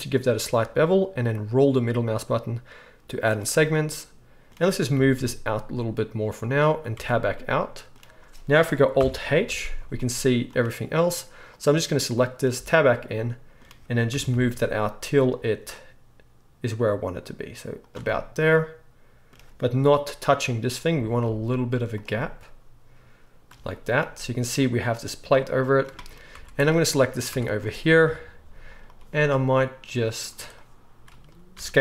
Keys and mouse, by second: 4.9 g, 6.9 Tab, 8.9 alt+h, 9.4 alt+a, 9.8-11.4 middle drag, 11.4 click, 11.5-30.1 middle drag, 12.5 Tab, 14.1 g, 20.9 g, 26.3 Tab, 27.3 Tab, 28.0 KP_3, 28.5 z, 30.1-31.8 drag, 31.5 s.